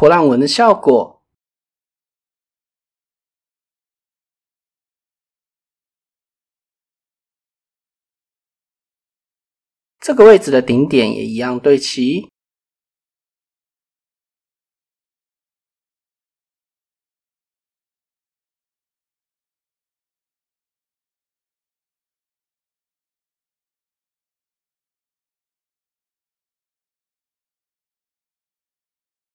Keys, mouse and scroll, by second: 2.4 middle click, 3.4 middle click, 5.0 middle click, 5.4 drag, 6.4 Tab, 7.1-8.6 shift+middle drag, 8.9 shift+click, 9.3 click, 10.8 shift+click, 13.5 z, 13.5 x, 14.1 KP_0, 15.3 Escape, 15.7 s, 16.0 z, 16.2 KP_0, 16.6 KP_Enter, 17.4 middle click, 20.7 z, 21.2 KP_0, 21.5 KP_Enter, 22.2 KP_7, 23.1 shift+middle click, 23.4 Tab, 25.0 shift+middle click, 25.5 Tab, 25.9 shift+middle click, 26.2 middle click, 27.1 middle click, 28.0 middle click, 29.1 shift+middle click.